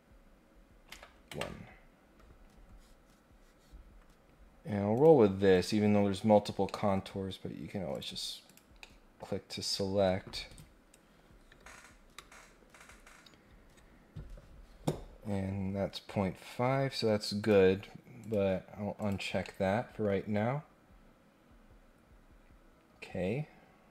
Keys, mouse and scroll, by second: 4.9 click, 5.5 click, 6.6 middle click, 7.9 click, 8.4 click, 8.8 middle click, 17.4 click, 18.2 click, 19.0 click, 19.4-23.0 middle drag.